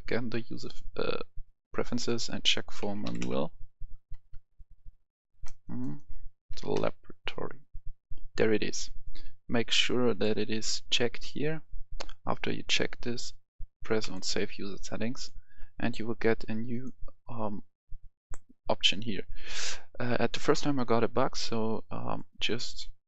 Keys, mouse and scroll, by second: 2.7-4.0 typing, 6.4 typing, 8.9 click.